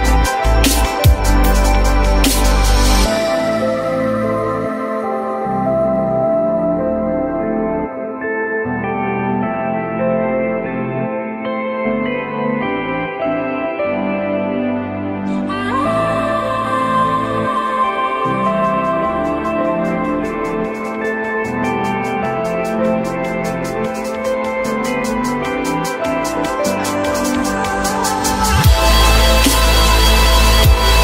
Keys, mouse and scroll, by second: 1.1-2.4 typing, 8.9 w, 11.5 alt+middle click, 12.0 alt+middle click, 15.6 alt+middle click, 16.1 alt+middle click, 16.6 alt+middle click, 18.7 alt+middle click, 19.6 alt+middle click, 22.2 alt+middle click, 23.6 F4, 24.0 F4.